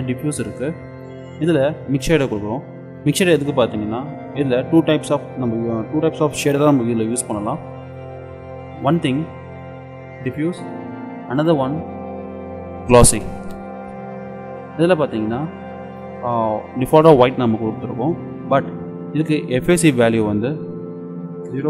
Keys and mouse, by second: 1.0-2.9 drag, 8.9-10.8 drag, 11.5-13.4 drag, 20.2-21.6 drag.